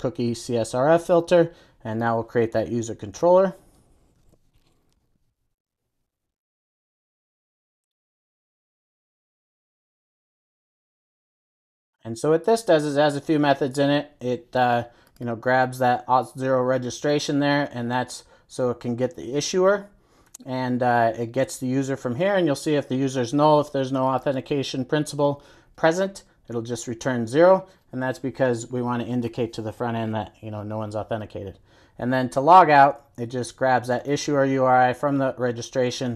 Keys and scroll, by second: 4.3 super+n, 8.5 super+a, 11.3 super+s.